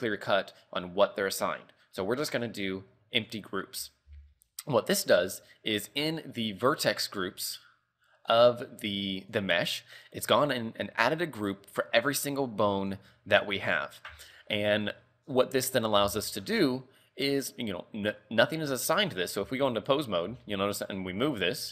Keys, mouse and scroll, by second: 5.1 right click, 7.0 click, 8.4 click, 9.4 right click, 10.5-12.9 scroll up 25, 12.9 click, 13.5-13.9 scroll up 3, 14.5-16.9 scroll down 30, 19.2 right click, 19.6 ctrl+Tab, 20.1 right click, 20.6 r, 21.6 KP_3.